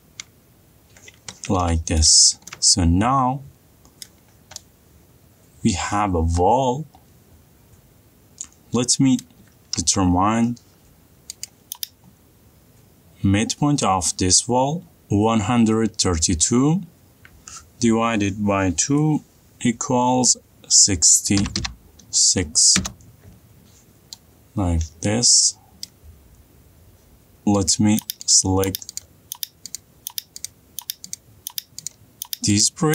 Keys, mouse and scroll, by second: 1.4 middle click, 1.7 middle click, 1.7 middle click, 2.2 middle click, 2.3 middle click, 4.4 middle click, 4.6 middle click, 4.7 middle click, 4.9 middle click, 8.3 middle click, 9.6 middle click, 10.2 t, 11.9 click, 21.8 6, 22.0 6, 23.2 Return, 26.3 middle click, 27.4 middle click, 27.5 middle click, 28.1 click, 28.8 ctrl+click.